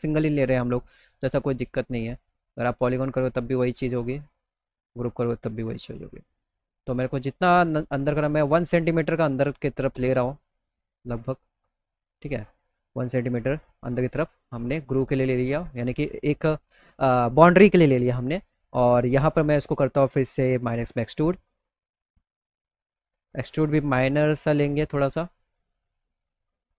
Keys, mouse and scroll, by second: 0.5-3.7 drag, 11.8-12.2 scroll down 2, 12.9 alt+middle click, 13.7 middle click, 13.8 middle click, 13.9 middle click, 14.7 middle click, 15.0 middle click, 15.3 middle click, 18.6 right click, 18.7 click, 20.1 click, 21.9-23.0 drag.